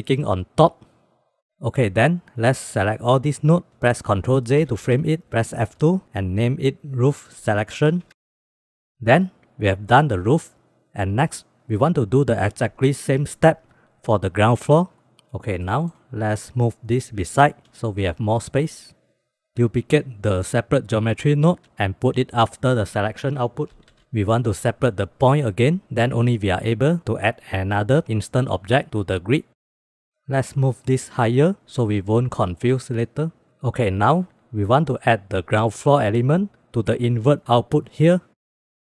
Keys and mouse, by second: 0.4 click, 1.1 click, 1.2 click, 1.8-3.7 drag, 4.7 ctrl+j, 5.8 F2, 6.4 o, 15.1 ctrl+s, 15.8 click, 16.2-16.7 drag, 16.7 g, 18.3 click, 19.4 shift+f, 19.8 shift+d, 23.1-23.7 drag, 25.1-27.6 drag, 30.0 middle click, 30.2-31.2 drag, 32.2 middle drag, 33.2 middle click, 34.1-37.5 drag.